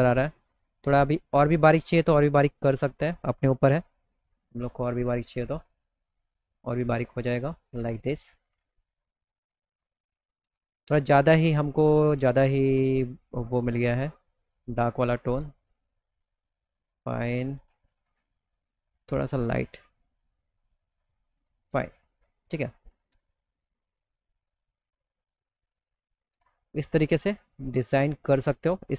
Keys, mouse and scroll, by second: 0.8 click, 1.5-2.6 drag, 4.1 2, 4.9 click, 5.9 middle click, 6.4 alt+middle click, 7.4 middle click, 7.7 middle click, 8.1 alt+middle click, 9.9 click, 11.5 click, 13.3 click, 14.8 click, 16.5 click, 18.1 click, 19.6 click, 20.7 middle click, 20.7 scroll, 21.4 alt+middle click, 22.1-22.4 scroll up 3, 22.6 alt+middle click, 23.9 click, 24.4 click, 25.0 alt+middle click, 25.9 alt+middle click, 26.2 middle click, 26.6-27.7 alt+middle drag, 28.6 click.